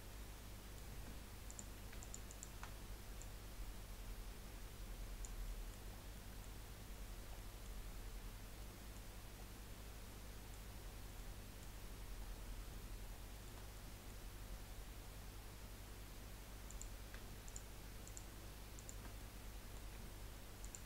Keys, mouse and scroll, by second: 0.2 middle click, 1.0 Tab, 1.5 click, 2.0 alt+shift+click, 2.2 alt+shift+click, 3.2 click, 5.6 middle click, 6.1 scroll down 3, 6.3-7.3 middle drag, 7.3 scroll down 1, 7.5-9.1 middle drag, 9.1 scroll up 2, 9.4-10.7 middle drag, 10.7 scroll up 2, 11.2 middle click, 11.8-12.7 scroll up 4, 12.7-16.6 shift+middle drag, 16.6 click, 17.4 shift+click, 18.0 shift+click, 18.8 shift+click, 19.1-20.6 middle drag, 20.6 shift+click.